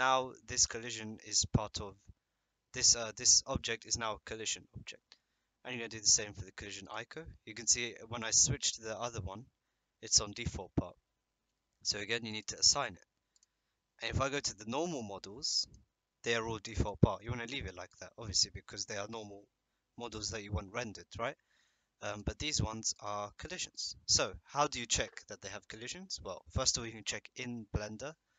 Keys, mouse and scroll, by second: 6.8 click, 13.3 click, 17.9 click, 22.1 click, 23.4-23.9 drag.